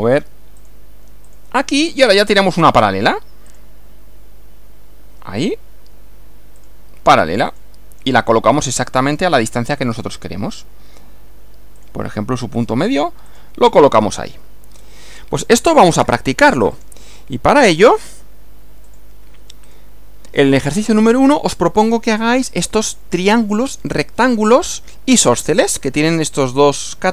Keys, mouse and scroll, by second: 0.6 click, 1.3 click, 2.3 click, 3.5 click, 6.6 click, 7.5 click, 10.0 click, 11.8 click, 12.6 click, 13.3 click, 14.7 scroll down 1, 16.7 click, 18.9 click.